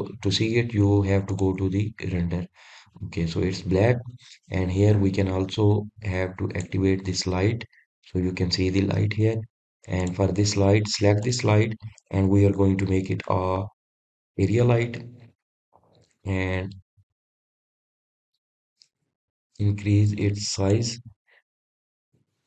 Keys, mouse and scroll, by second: 0.3 click, 3.1 click, 6.6-8.3 scroll up 2, 8.3 click, 9.9 scroll up 1, 10.0-11.8 middle drag, 11.8 click, 13.0 click, 16.0 click, 17.0-20.1 middle drag, 21.8-22.4 drag.